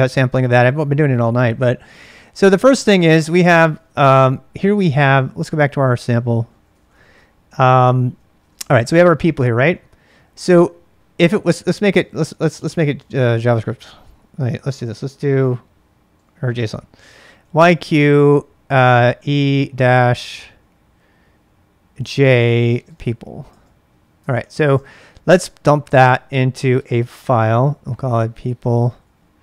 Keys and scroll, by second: 3.2-4.1 typing, 4.8 ctrl+a, 4.9 ctrl+a, 6.2-8.9 typing, 7.4 ctrl+a, 12.2-12.9 typing, 14.0-14.8 typing, 16.1 typing, 17.4 typing, 18.8-19.6 typing, 22.0-22.9 typing, 23.0 Tab, 23.5 Return, 24.0-26.7 typing, 27.8-29.4 typing.